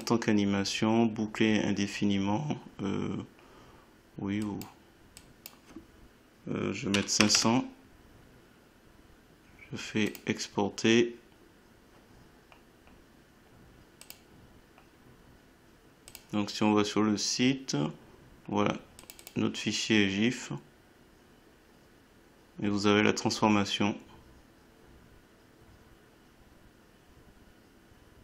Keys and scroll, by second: 13.2 5.